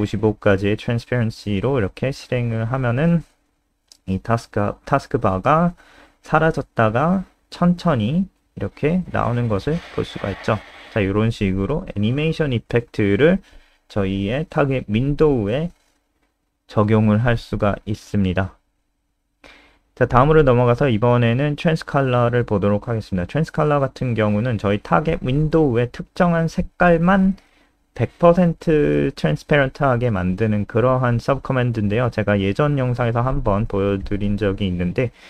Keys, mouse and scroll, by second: 1.7 ctrl+s, 7.7 F5, 14.6 click, 15.3 F5, 20.5 click, 20.8 scroll down 3, 28.2 click, 29.5 ctrl+c, 29.7 click, 30.0 click, 31.0 ctrl+v, 31.1 ctrl+s, 31.3 click.